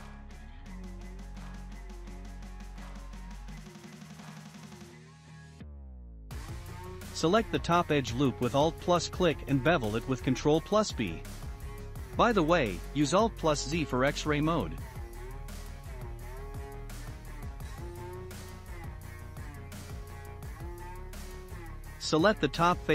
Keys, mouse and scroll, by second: 1.5-2.0 scroll down 1, 2.0-5.1 shift+middle drag, 6.3 2, 7.0 click, 7.1 click, 8.0 scroll up 2, 8.4 shift+middle click, 9.8-11.1 middle drag, 11.7-16.4 shift+middle drag, 13.4 ctrl+b, 20.0 shift+middle click, 20.7-21.3 scroll up 2, 21.7 click, 22.7 3.